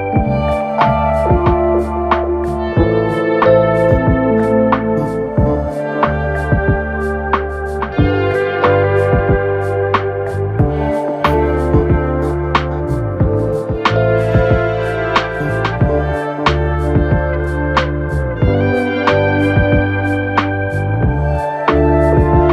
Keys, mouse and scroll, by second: 0.0-0.8 typing, 0.2-0.8 scroll down 2, 1.9 click, 2.9 shift+click, 3.7-5.0 scroll up 1, 5.0 f, 5.8 f, 6.7 click, 7.1 f, 7.5 f, 8.2 KP_1, 9.8 1, 10.6 click, 11.4 click, 14.5-15.5 drag, 16.5 click, 17.8 click, 18.8-19.4 scroll down 2, 19.4 KP_3, 20.0-20.3 scroll down 1, 20.3-22.2 middle drag, 22.2 click.